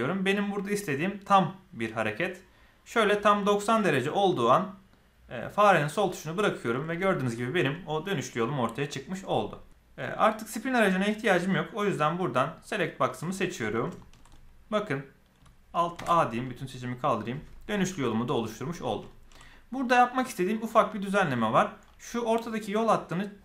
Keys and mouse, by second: 6.9-7.2 shift+middle drag, 12.5 click, 14.0 shift+middle click, 14.2 middle click, 15.9 alt+a, 16.4-18.0 middle drag, 19.0 shift+middle click, 19.4 middle click.